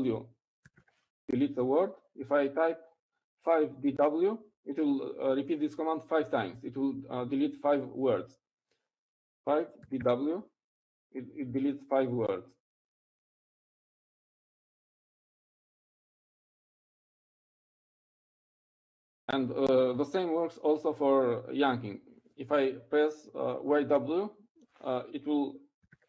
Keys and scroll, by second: 6.0-6.8 typing, 12.7-13.4 typing.